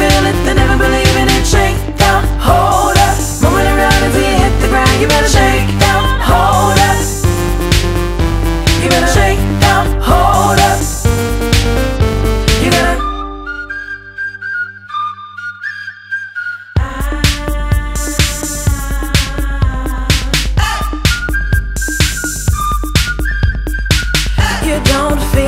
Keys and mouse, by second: 0.1 click, 0.9 ctrl+d, 1.8 click, 3.0 click, 9.9 click, 13.4 click, 14.5 click, 17.0 click, 18.7 click, 20.9 click, 21.7 click, 23.3 click, 23.4 click.